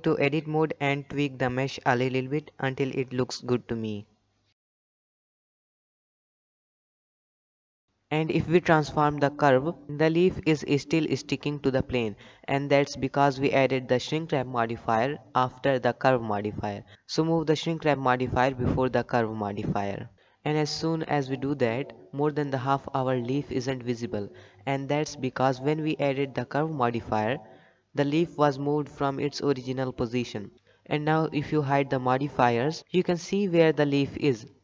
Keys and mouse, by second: 0.0 middle drag, 0.4 alt+a, 0.5-1.4 middle drag, 1.8 Tab, 2.1 a, 2.2 s, 3.5 KP_1, 3.8 shift+middle click, 4.0 middle click, 4.4 Tab, 4.5 middle click, 5.1-5.5 middle drag, 5.9 click, 6.0-6.8 middle drag, 6.8 alt+a, 7.1 shift+middle click, 7.1 shift+click, 7.8 click, 8.2-9.1 middle drag, 9.3 Tab, 9.7 click, 10.0 g, 11.7 middle click, 13.4 g, 16.3-16.9 middle drag, 20.2-20.8 drag, 22.4-23.0 middle drag, 26.8 click, 27.8 click, 32.0 KP_7, 32.9 shift+middle drag, 33.8 click, 34.4 g.